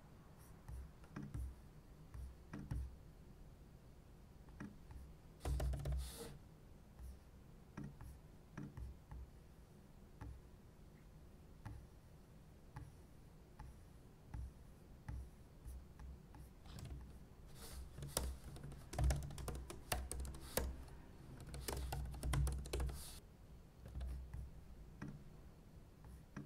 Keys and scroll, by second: 5.2-6.3 typing, 16.8 super+w, 17.9-23.3 typing, 20.5 Return, 23.9 super+s.